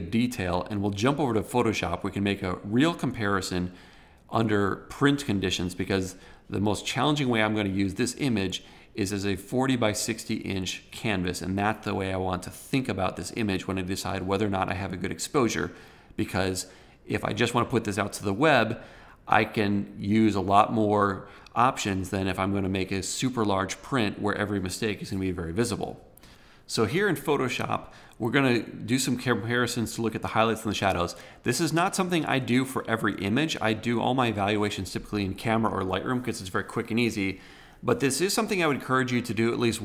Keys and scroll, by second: 26.1 super+Tab.